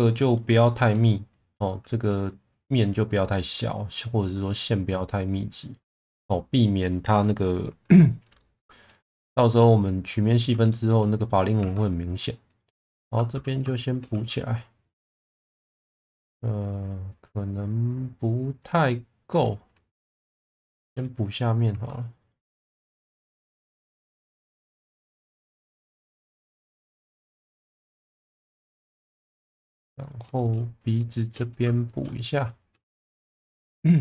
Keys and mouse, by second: 0.6 shift+middle click, 1.5 click, 3.6 click, 4.3 click, 6.0 shift+middle click, 8.3 middle click, 9.5-10.4 middle drag, 10.7 shift+middle drag, 11.6 2, 12.0 click, 12.5 shift+click, 13.0 f, 14.1 f, 15.8-19.3 middle drag, 19.9-20.3 middle drag, 20.7 shift+middle drag, 21.6 2, 22.1 click, 22.8 shift+click, 23.2 f, 23.6 click, 23.9 f, 24.9 ctrl+z, 26.0 f, 26.3 middle drag, 27.3 click, 27.7 shift+click, 27.9 f, 28.6-29.3 middle drag, 30.0 click, 30.3 shift+middle drag, 31.5 f, 32.4 shift+click, 32.9 f, 33.2-33.7 middle drag.